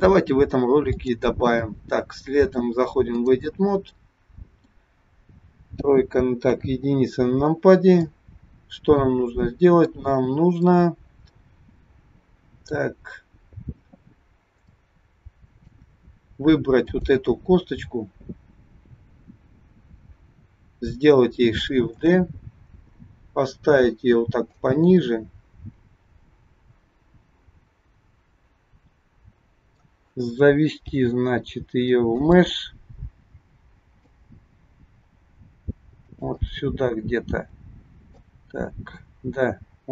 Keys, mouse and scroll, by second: 0.9 click, 3.9 middle click, 5.6 KP_3, 6.4 KP_1, 7.2 scroll up 2, 7.9 middle click, 10.2-10.7 scroll up 3, 10.7 middle click, 14.1 scroll up 1, 14.7 shift+scroll up 1, 14.8 shift+middle click, 16.8 click, 19.2 scroll up 1, 20.2-21.0 scroll down 2, 21.9 shift+d, 25.0 middle click, 30.8 g, 32.6 middle click, 34.3 g, 36.4 middle click, 38.3 g.